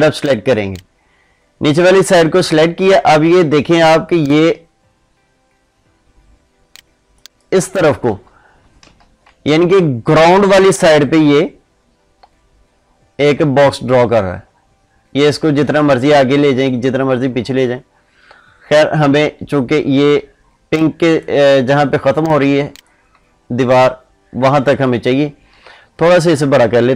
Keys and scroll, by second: 8.0 ctrl+z, 21.9 ctrl+space, 25.4 ctrl+z.